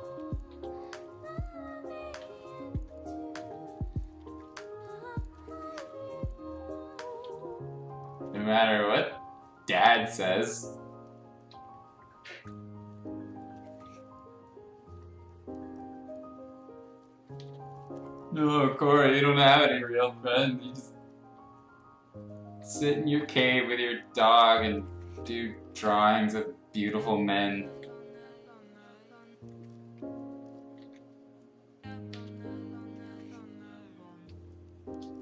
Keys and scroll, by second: 2.0 ctrl+z, 2.7 ctrl+z, 3.3 ctrl+z, 4.2 ctrl+z, 7.2 x, 9.9 x, 11.4 Escape, 13.8 x, 15.9 x, 17.3 ctrl+z, 22.5 ctrl+z, 23.3 ctrl+z, 25.0 ctrl+z, 25.8 ctrl+z, 27.6 ctrl+z, 29.5 ctrl+z, 30.8 ctrl+z, 32.1 ctrl+z, 34.4 space.